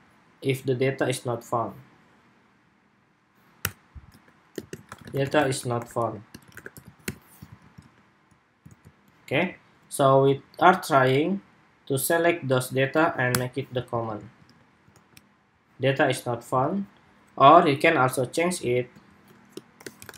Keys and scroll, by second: 7.4 super+s, 7.6 super+Tab, 8.4 super+r, 9.1 super+Tab, 13.2 super+/, 13.9 super+s, 14.3 super+Tab, 14.7 super+r, 16.3 super+Tab.